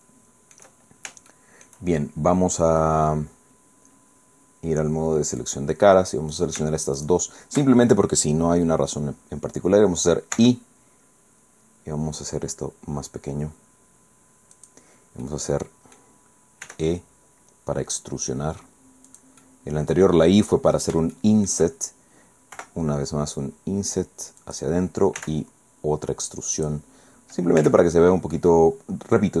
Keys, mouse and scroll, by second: 0.9 shift+scroll down 2, 1.3 shift+middle click, 2.0 shift+scroll up 2, 2.5 scroll down 2, 5.4 middle click, 6.3 click, 6.6 shift+right click, 7.0 shift+right click, 10.3 i, 14.5 click, 15.2 click, 16.7 e, 19.1 click, 19.4-20.5 drag, 20.6 middle click, 21.1 shift+click, 22.5 i, 24.4 click, 25.2 e, 26.5 click, 27.1 scroll down 1, 27.6 Tab, 27.9-28.3 scroll down 1, 28.3-29.3 drag.